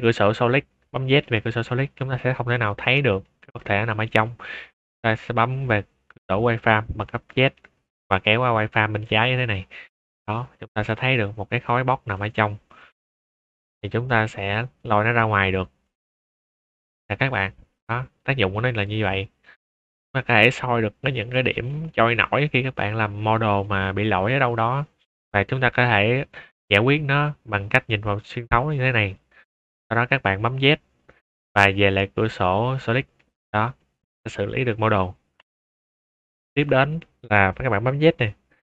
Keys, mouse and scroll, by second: 1.2 z, 1.9-3.2 middle drag, 3.3 shift+middle click, 3.7 scroll up 1, 4.0 middle drag, 4.4 z, 8.4 click, 9.3 click, 9.9 shift+middle click, 10.5-10.9 middle drag, 11.6 click, 12.1-12.7 middle drag, 12.8 scroll down 2, 13.6 click, 14.7-15.6 drag, 15.8 shift+middle click, 16.3 middle drag, 17.7 click, 18.1 drag, 19.1 middle click, 19.3-19.8 middle drag, 20.1 shift+middle drag, 20.7 middle click, 21.2-21.6 middle drag, 21.8 shift+middle drag, 22.9-23.3 middle drag, 23.6 shift+middle drag, 23.9-24.3 middle drag, 24.4 click, 25.5-26.2 middle drag, 26.5-27.2 middle drag, 27.4 scroll up 1, 27.5 middle click, 27.8 middle drag, 28.5 scroll down 2, 28.6-29.1 middle drag, 29.2-29.9 scroll up 2, 30.5 z, 32.7 click, 33.3-33.7 middle drag, 35.3 click, 35.6 x, 35.8 click, 37.8 z.